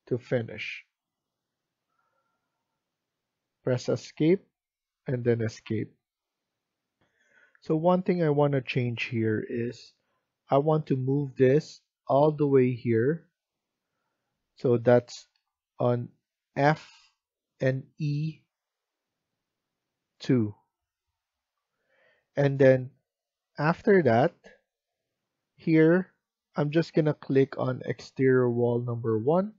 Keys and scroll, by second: 4.0 Escape, 4.6 Escape, 6.9 F1, 23.6 Escape, 23.9 Escape.